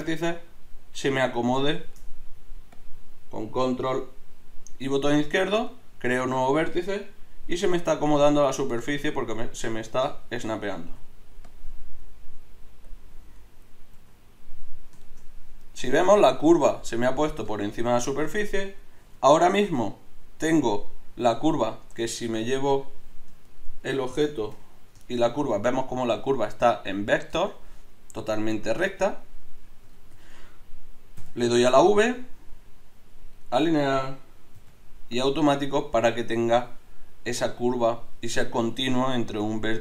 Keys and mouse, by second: 2.7-5.6 drag, 7.5 g, 9.6 click, 14.0 g, 19.0 z, 19.6 middle click, 21.4 z, 22.4 Tab, 24.6 KP_Divide, 27.4 Tab, 28.4-30.2 drag, 28.8 Tab, 29.8 a, 30.2 a, 31.2 v, 34.6 v, 37.8 click.